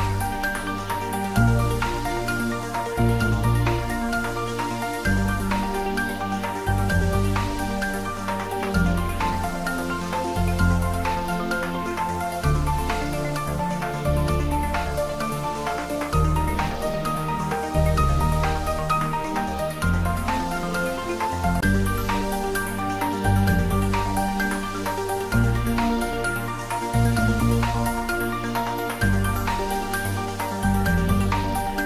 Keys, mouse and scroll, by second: 0.5 a, 2.9 s, 10.6 s, 12.1 click, 13.8-15.7 scroll down 1, 16.7 g, 28.9 click.